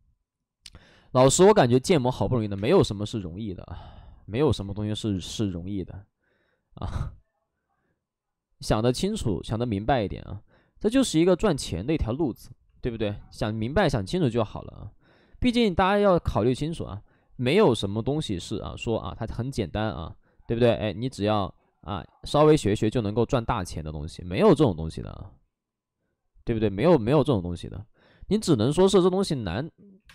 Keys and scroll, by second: 0.8 space, 1.3 space, 2.3 space, 2.3 3, 4.4 ctrl+z, 5.1 b, 6.8 space, 8.7 ctrl+z, 10.9 ctrl+z, 14.0 ctrl+z, 14.4 ctrl+z, 15.4 ctrl+z, 17.0 ctrl+z, 21.5 ctrl+z, 27.6 ctrl+z, 28.5 space, 29.8 3, 29.9 space.